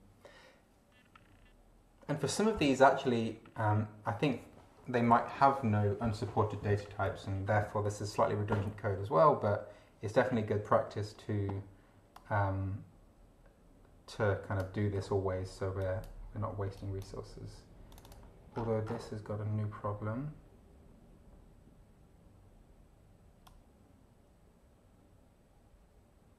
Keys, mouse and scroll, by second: 2.5 scroll up 2, 12.2-14.8 drag, 15.8 click, 16.7 click, 17.9 click, 18.6 scroll down 2, 23.4-26.3 drag.